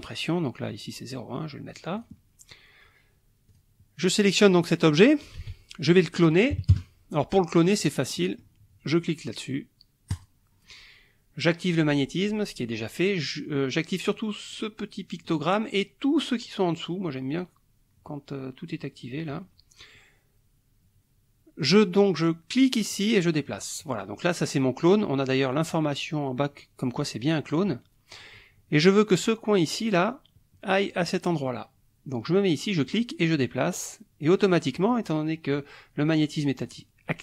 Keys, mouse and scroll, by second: 0.7-1.9 drag, 2.0 click, 3.5 click, 4.2-5.4 drag, 5.4 ctrl+z, 5.9 ctrl+click, 6.6 KP_Subtract, 6.7 KP_Add, 7.8 click, 8.1 click, 10.1 click, 14.5 click, 15.2 click, 22.9-24.1 drag, 28.1 click, 32.7-35.1 drag, 36.7 click.